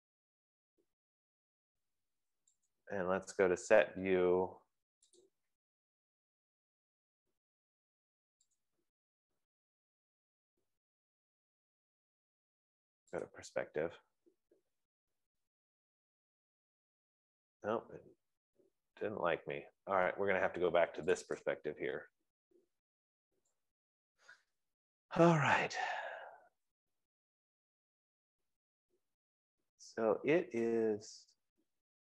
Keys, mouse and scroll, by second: 0.9 click, 3.4 click, 5.7 click, 9.0-10.5 drag, 14.1 click, 14.9 click, 14.9-15.8 scroll, 16.0-16.4 scroll, 16.9-17.8 scroll, 18.1-19.5 scroll, 21.7 click, 22.6 click, 22.9-23.9 scroll, 24.1-24.9 scroll, 24.9-25.4 scroll, 25.9 click, 26.5 right click, 26.5-27.9 scroll, 28.7 scroll, 30.2 scroll, 31.0-31.7 scroll.